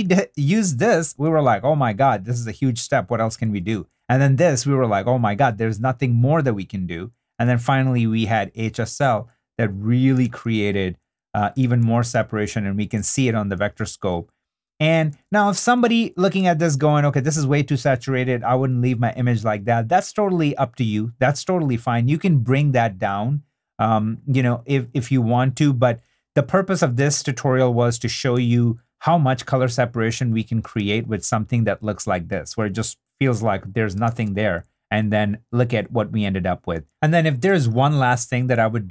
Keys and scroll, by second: 3.4 super+d, 7.4 super+d, 11.6 super+d, 13.5 3, 14.9 super+d, 16.4 i, 17.1 2, 26.0 3, 26.7 i, 28.3 3, 30.8 shift+d, 34.1 shift+d.